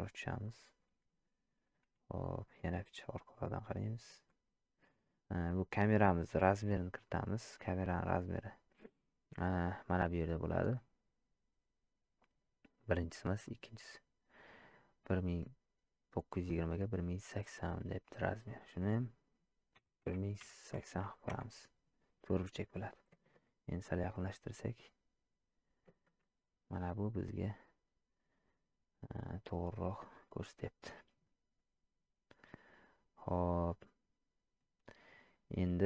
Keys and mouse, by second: 3.0-4.1 ctrl+middle drag, 12.8 click, 18.5-21.8 drag, 23.6-25.8 ctrl+middle drag.